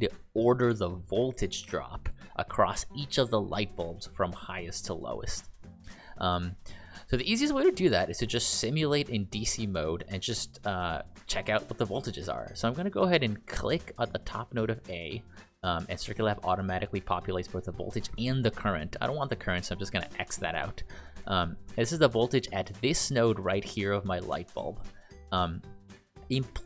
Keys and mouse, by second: 0.8 ctrl+click, 14.2 click.